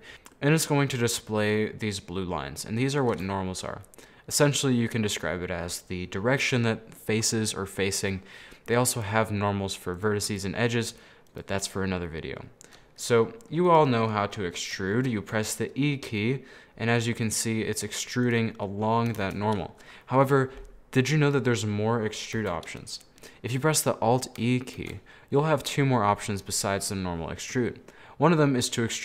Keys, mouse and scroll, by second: 0.0-3.1 middle drag, 3.1-3.4 scroll up 2, 3.4 shift+middle click, 4.3 scroll up 1, 4.4-9.0 middle drag, 9.0-12.0 drag, 12.4 scroll down 1, 12.5-13.8 middle drag, 13.8 right click, 14.4-15.4 middle drag, 15.4 e, 18.6 middle click, 19.2 ctrl+z, 19.7-22.5 middle drag, 22.5 a, 23.4 middle click, 24.1-24.9 scroll down 2, 24.9 alt+e.